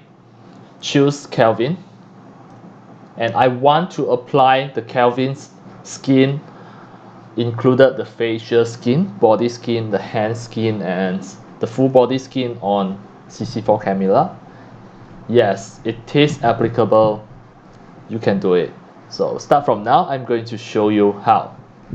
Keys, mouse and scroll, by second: 0.8-2.5 drag, 3.0-12.4 drag, 13.0-21.9 drag.